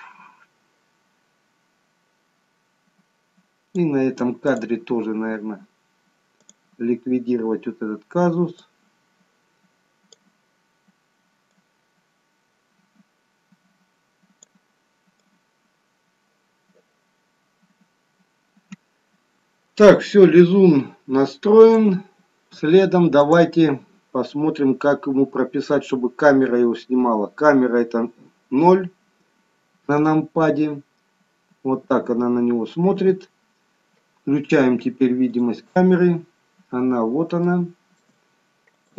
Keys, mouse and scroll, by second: 4.4 click, 7.0 click, 8.5 click, 11.5 click, 15.1 click, 23.2 click, 28.0 KP_0, 33.0 KP_0, 35.3 click, 36.2-37.3 scroll down 1, 37.3-38.0 scroll down 2, 38.0 shift+middle click, 38.7 click.